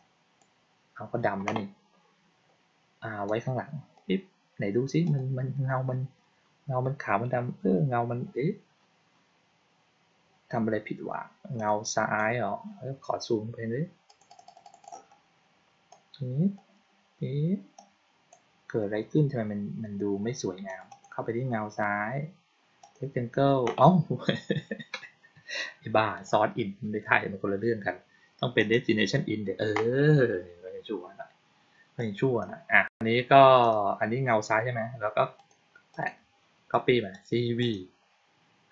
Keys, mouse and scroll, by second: 3.1 click, 4.9 click, 11.5 click, 12.1 click, 14.0 click, 14.2 click, 14.3 click, 14.5 click, 14.7 click, 15.8-16.4 drag, 17.7-18.2 drag, 20.6 click, 20.8 click, 22.7 click, 26.0 click, 28.5 click, 31.9-32.3 drag, 33.5 click, 35.3 click, 35.8 click, 37.0 click, 37.5 click.